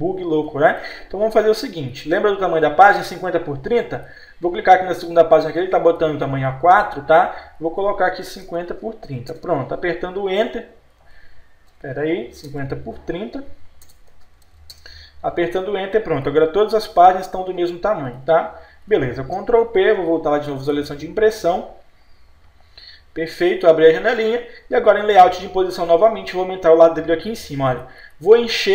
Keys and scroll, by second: 8.3 5, 8.4 Insert, 8.7 Tab, 8.8 Page_Down, 9.1 Insert, 9.5 Return, 11.7 Num_Lock, 12.5 0, 13.0 3, 13.9 BackSpace, 14.2 Tab, 14.5 0, 14.8 Return, 19.4 ctrl+p.